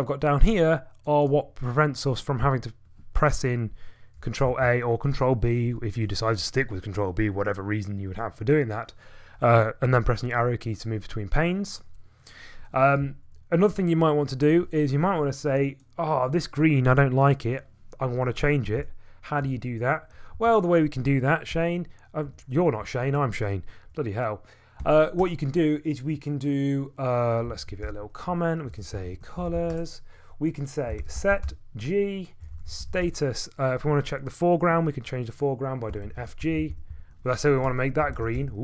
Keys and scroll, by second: 13.0-13.7 j, 18.8 o, 19.4 BackSpace, 20.3 Escape, 21.5 k, 22.2 j, 22.8 j, 24.8-25.2 typing, 27.8 alt+3, 28.7-33.5 typing, 35.7-38.6 typing, 37.6 Return.